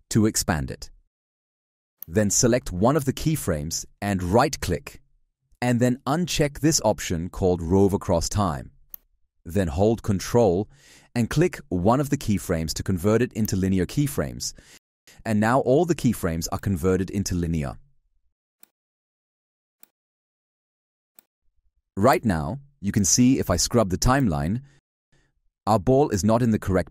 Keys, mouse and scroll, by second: 13.2 ctrl+click, 17.4 alt+click, 20.4 alt+click.